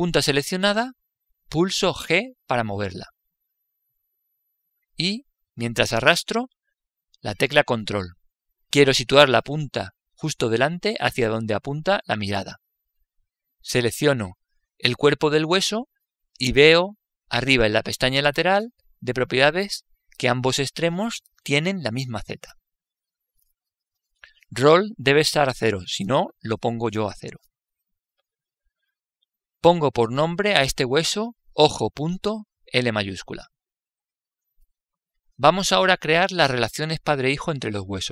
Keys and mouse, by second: 2.5 g, 13.6-16.2 middle drag, 16.2 right click.